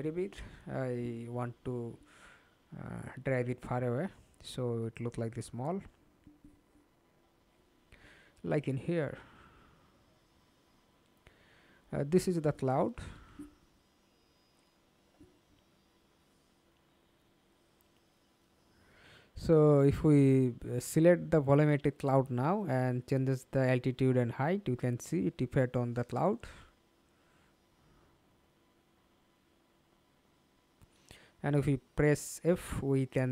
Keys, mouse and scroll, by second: 0.6-1.2 alt+scroll down 6, 1.2 alt+click, 3.1 alt+click, 4.5 alt+middle click, 10.1-10.4 alt+scroll down 2, 10.4 alt+click, 29.3 middle click, 30.4 alt+click, 31.2 alt+right click.